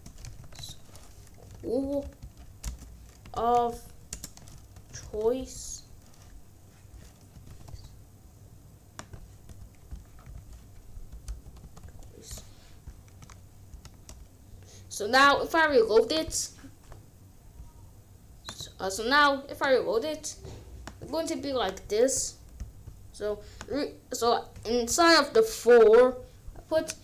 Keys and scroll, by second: 0.0-5.8 typing, 7.0-8.1 typing, 9.4 c, 10.8 Right, 11.4 BackSpace, 11.7 c, 12.2 Return, 13.7 ctrl+s.